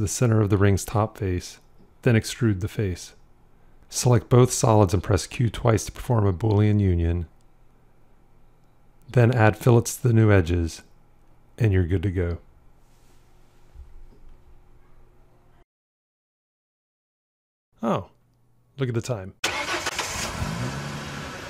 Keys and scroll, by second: 6.8 q.